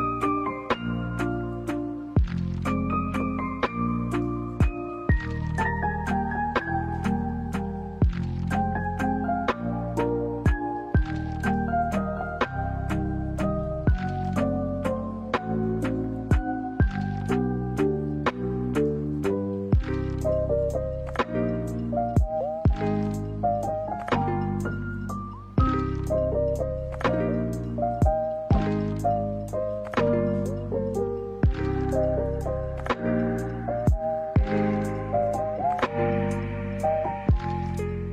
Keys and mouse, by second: 4.4-6.1 middle drag, 6.6 g, 8.1 e, 12.6 alt+s, 16.8-19.0 middle drag, 19.2 a, 20.4 click, 20.9-22.4 middle drag, 27.7 middle click, 30.1 ctrl+s, 30.8 ctrl+a, 32.5 middle click, 33.3 ctrl+a, 35.0 middle click, 35.8 ctrl+a, 36.8 middle click, 37.4-38.1 middle drag.